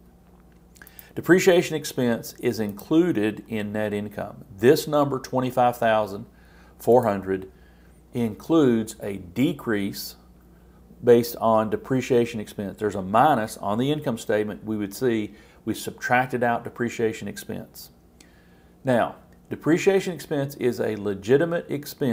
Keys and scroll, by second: 1.6 super+c, 3.5 super+v.